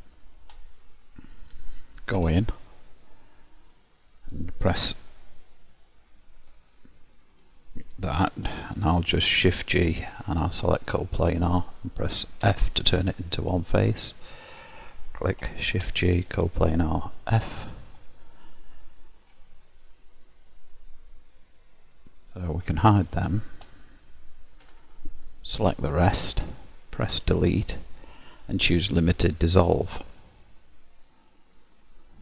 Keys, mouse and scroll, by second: 0.6 click, 1.6 click, 2.2 Tab, 3.2 middle click, 6.0 middle click, 7.4 click, 9.4 shift+g, 12.6 f, 13.2 middle click, 14.6 click, 15.8 shift+g, 17.6 f, 18.1 middle click, 19.8-20.6 scroll up 3, 21.6 click, 22.2 click, 22.8 middle click, 23.6 shift+click, 24.8 h, 25.7 l, 26.2 middle click, 27.5 Delete.